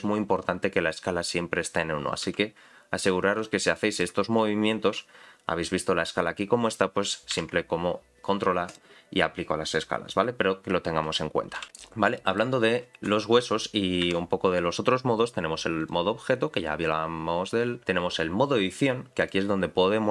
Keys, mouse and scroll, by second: 2.3 s, 3.8 middle click, 4.4-7.0 scroll up 4, 7.0 scroll up 1, 7.3 ctrl+a, 11.6 n, 11.9 scroll down 2, 12.1 shift+middle click, 14.0 KP_Decimal, 15.8-17.8 drag, 19.2 click.